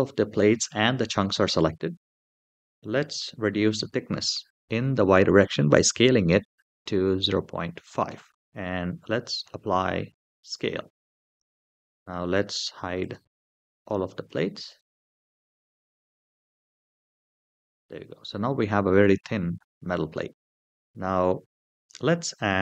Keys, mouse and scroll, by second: 3.3 s, 5.7 y, 7.0 KP_Decimal, 7.3 KP_5, 7.8 KP_Enter, 9.2 ctrl+a, 11.1 click, 12.8 click, 13.5 click, 14.0 click, 14.5 click, 14.8 click, 15.3 click, 15.9 click, 16.5 click, 16.9 click, 17.3 click, 17.9-18.6 middle drag, 18.9 scroll up 2, 19.7-20.7 middle drag, 20.7 scroll down 2, 22.4 shift+a.